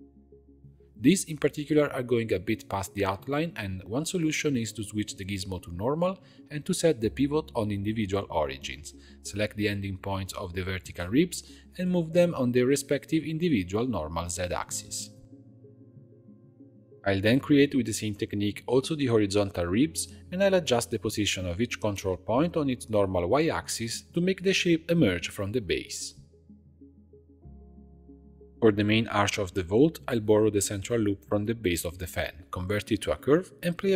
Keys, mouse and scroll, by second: 0.8 click, 1.7 right click, 1.8-3.7 shift+middle drag, 3.7 click, 3.8 Tab, 4.8 click, 6.0-9.0 drag, 9.6 click, 10.3 shift+click, 11.4 shift+click, 13.2 g, 16.5 click, 16.8 2, 17.4 alt+click, 18.1 alt+shift+click, 18.9 shift+d, 19.9 p, 20.5 Tab, 20.8 shift+click, 21.8 shift+click, 22.4 shift+click, 23.3 shift+click, 24.3 g, 28.5 Tab, 28.9 2, 29.5 alt+click, 30.5 shift+d, 31.5 p, 32.1 Tab, 32.4 click.